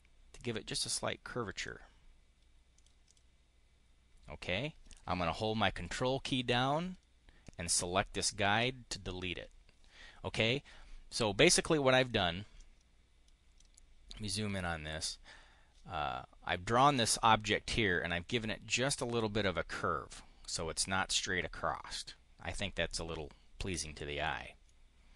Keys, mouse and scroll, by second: 2.6 click, 3.0 click, 8.1 ctrl+click, 11.8 click, 12.4-13.4 drag, 14.4 click, 14.7 right click, 24.6-25.1 drag.